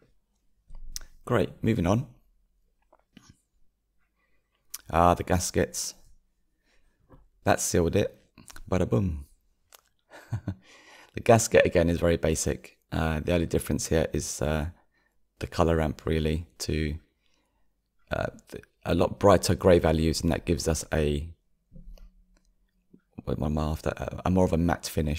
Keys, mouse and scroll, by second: 0.0 ctrl+space, 0.9-1.4 scroll down 4, 1.7-4.7 shift+middle drag, 4.7 click, 5.9 g, 10.7-13.8 drag, 16.4 click, 22.7 click, 23.4 scroll up 4, 24.0-24.9 middle drag.